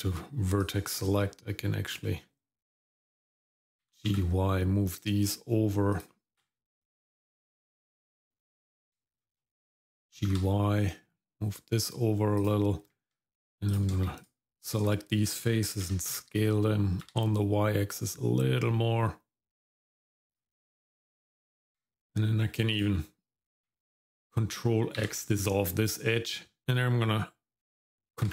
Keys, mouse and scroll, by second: 0.6-1.9 drag, 3.8 g, 6.3 ctrl+z, 6.8-8.3 drag, 9.1 shift+click, 10.1 g, 12.9 Tab, 13.7 click, 14.2 shift+click, 14.6 shift+click, 15.8 s, 21.6 Tab, 22.7 click, 25.0 ctrl+x, 28.2 ctrl+r.